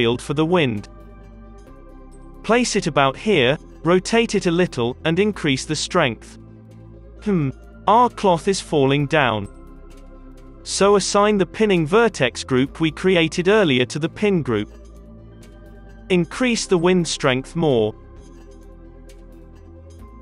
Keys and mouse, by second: 0.8 g, 1.4 r, 2.0 g, 2.5 r, 3.3-5.3 drag, 5.9 space, 7.0 space, 13.8 space, 15.1-19.2 middle drag, 16.3 space, 17.7 KP_0, 18.7 space, 19.6 middle click.